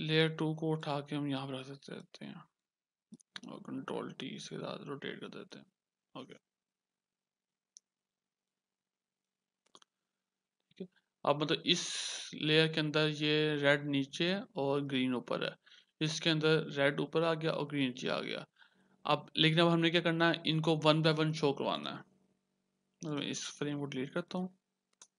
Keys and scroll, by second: 3.8 ctrl+t, 9.8 Return.